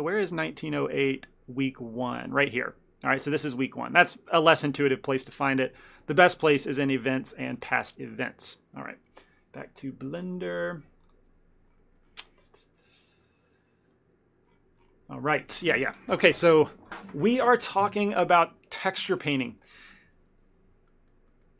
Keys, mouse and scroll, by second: 19.8 click, 20.2 Tab, 21.0 ctrl+middle click.